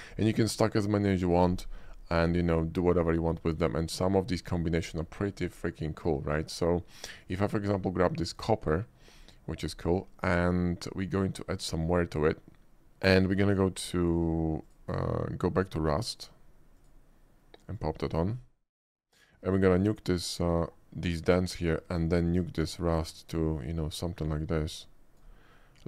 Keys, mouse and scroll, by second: 3.3 middle click, 4.5 middle click, 4.8 click, 5.4 click, 7.2 click, 13.1 click, 14.7 click, 16.8 click, 17.8 click, 19.9-21.4 drag, 22.5-25.2 drag.